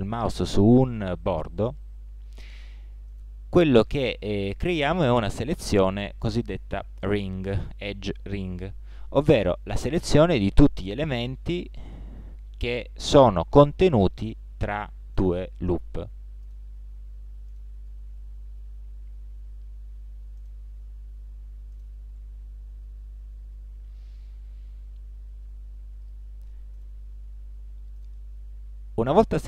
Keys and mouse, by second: 1.6-5.8 drag, 11.2 ctrl+Tab, 13.3-14.4 drag, 25.4 ctrl+Tab.